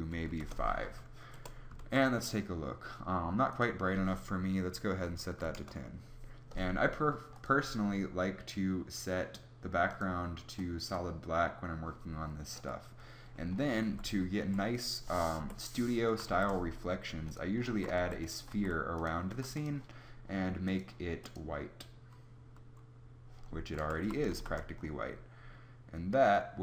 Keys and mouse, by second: 1.2 KP_0, 1.8 shift+z, 13.8 z, 14.3 KP_1, 15.3 KP_1, 16.2 shift+a, 17.6 z, 17.9 s, 18.4 s, 19.2 s, 23.7 KP_0, 23.9 z.